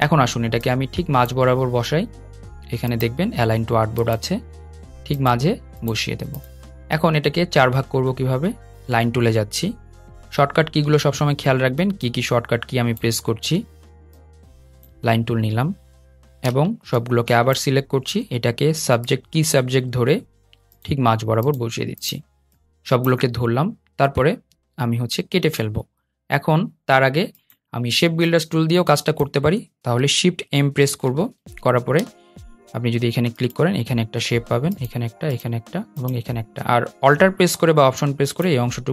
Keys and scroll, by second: 9.1 \, 16.0 v, 31.7 shift+m.